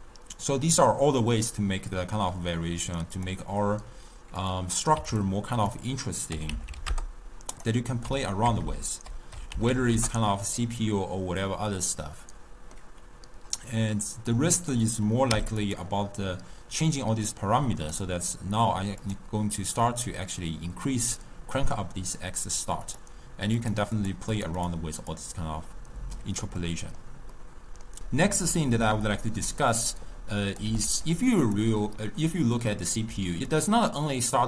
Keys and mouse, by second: 3.2-5.3 drag, 5.6-8.7 drag, 8.7 BackSpace, 12.1-14.6 middle drag, 14.6-15.8 drag, 17.9-19.2 drag, 23.0 click, 23.7 click, 24.1 click, 24.4 click, 24.7 click, 25.1 click, 26.7-28.0 middle drag, 28.0 n, 28.8 middle click, 29.7 click, 30.7 g, 33.1-34.4 typing, 33.5-34.0 drag.